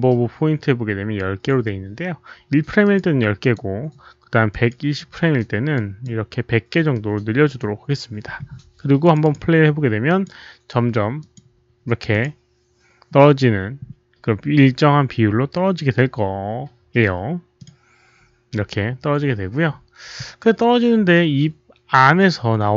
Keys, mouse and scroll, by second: 0.6 click, 2.7 click, 2.8 right click, 3.3 click, 4.4 click, 5.7 click, 6.0 right click, 6.9-7.5 right drag, 7.5 click, 9.0 click, 9.1 click, 10.0 click, 11.1 right click, 11.1 click, 12.0 click, 12.0 right click, 13.4 click, 13.4 right click, 14.1 click, 14.3 right click, 17.5 click, 18.7 click, 21.9 click.